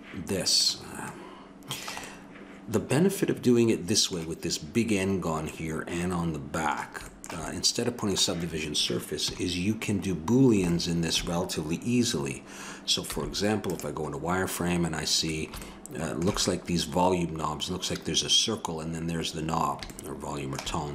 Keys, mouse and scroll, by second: 0.7 ctrl+s, 1.1 middle click, 2.2 middle click, 3.9-5.5 middle drag, 6.4-8.4 middle drag, 9.2 KP_7, 13.0 z, 18.4-20.4 middle drag.